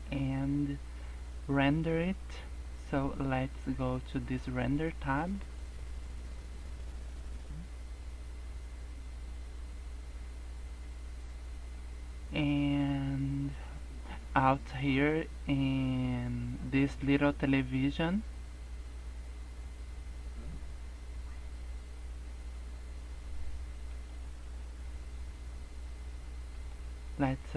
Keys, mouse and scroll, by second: 4.5 click, 17.1 click, 26.5 click.